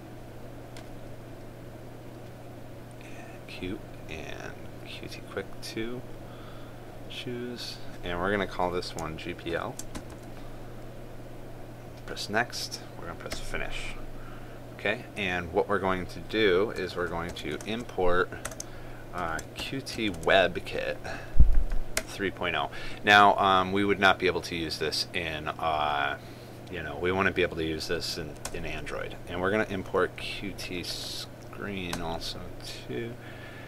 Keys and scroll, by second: 18.3 ctrl+space, 20.9 ctrl+space.